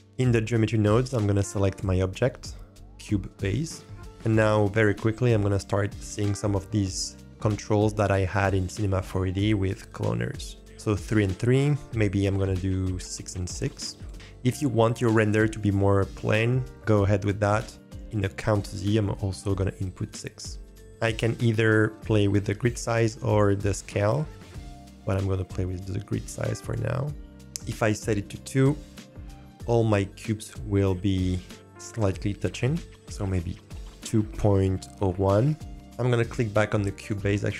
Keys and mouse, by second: 0.1 click, 1.7-3.4 drag, 12.5-14.0 drag, 18.6-20.1 drag, 25.0-26.7 drag, 27.9-28.5 middle drag, 28.9 middle click, 29.3 shift+middle drag, 30.5-30.8 shift+drag, 33.3-35.7 drag, 36.6-37.0 drag.